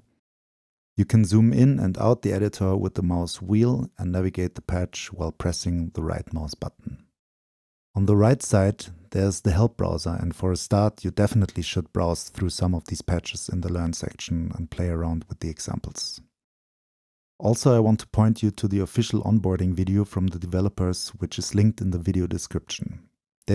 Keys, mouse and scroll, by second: 0.0 click, 1.5-2.1 scroll up 2, 2.1-2.7 scroll down 2, 2.7-4.4 scroll down 1, 4.4-4.9 scroll down 1, 4.9 click, 5.6-6.7 drag, 13.7-14.3 drag, 14.3-15.5 scroll down 2, 15.5-16.7 scroll down 1, 16.7-17.7 scroll down 1, 17.7-18.7 scroll up 2, 18.7-20.0 scroll up 1, 20.0-21.9 scroll up 1, 21.9-23.5 scroll up 1.